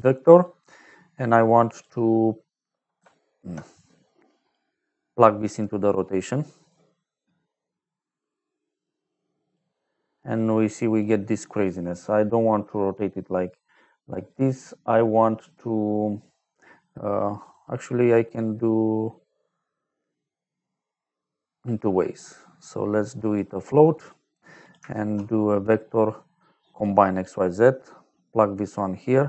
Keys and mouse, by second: 0.3 click, 2.9 alt+click, 4.8 middle click, 5.7 middle click, 6.6 click, 10.0 middle click, 10.9 click, 17.3 click, 23.2 click, 24.0 click, 24.5 click, 24.8 shift+a, 26.6 click, 27.1 click, 28.1 click.